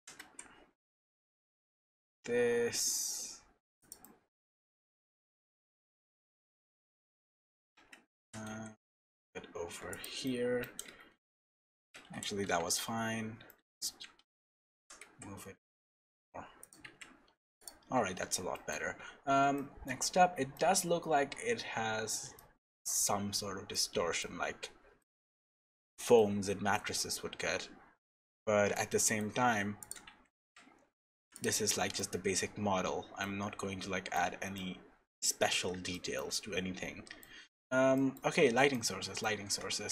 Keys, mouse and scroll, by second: 4.0 middle click, 4.8-5.4 scroll down 3, 5.2 scroll up 1, 5.4 middle click, 6.5 scroll down 1, 6.9 middle click, 7.8 a, 8.2 g, 10.2 middle click, 10.9 ctrl+z, 11.9 ctrl+shift+z, 12.4 Tab, 12.8 scroll down 2, 13.0 scroll up 3, 13.5 middle click, 13.9 Tab, 14.2 a, 14.8 g, 16.8 Tab, 17.0-17.7 scroll down 10, 17.6 click, 17.8-18.5 scroll up 11, 18.5 middle click, 19.0-19.5 scroll up 3, 19.5 shift+middle click, 20.6 middle click, 21.5-22.0 scroll up 2, 22.0-22.3 scroll down 1, 22.3 scroll down 3, 22.8 shift+middle click, 24.5-25.0 scroll down 3, 25.0 shift+middle click, 26.1 middle click, 27.2-27.7 scroll down 3, 27.7-28.7 scroll up 7, 28.7 shift+middle click, 29.5 scroll up 2, 29.8 click, 30.1 Tab, 30.4 Tab, 30.6-31.2 scroll down 11, 31.3 click, 31.7 middle click, 32.6-33.2 scroll down 2, 33.2 middle click, 34.5 middle click, 35.5-35.9 scroll up 5, 35.9 shift+middle click, 37.9 middle click, 38.4 scroll down 4, 38.7 middle click, 39.5-39.9 scroll down 1.